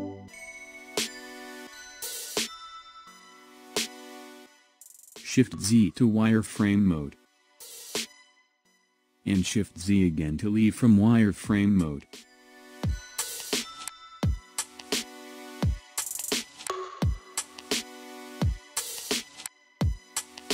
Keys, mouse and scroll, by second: 0.3-3.3 middle drag, 4.1 KP_1, 5.4 shift+z, 8.1 drag, 9.6 shift+z, 10.6-11.9 middle drag, 11.9 KP_1, 13.2 s, 15.0 click, 15.8 scroll down 2, 16.4-19.3 middle drag, 19.3 click, 20.0 scroll up 2.